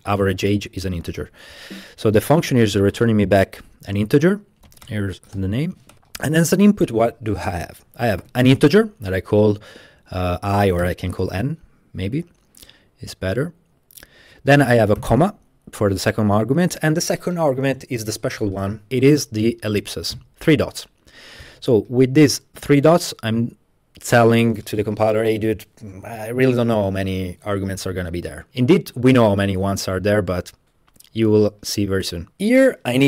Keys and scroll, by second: 2.9-6.5 typing, 7.8-9.2 typing, 10.6 typing, 15.0 typing, 19.8-20.6 typing.